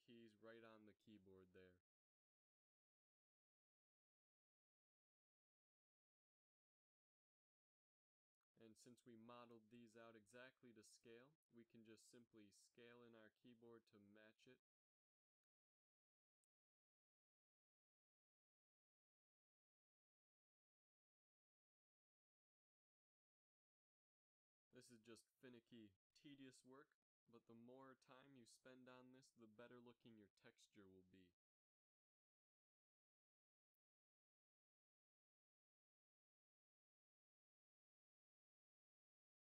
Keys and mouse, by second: 3.0 g, 9.1-10.0 drag, 12.3 s, 15.5 g, 18.0 g, 20.7 s, 24.1 s, 26.8 g, 31.0 g, 34.7 s, 36.5 s.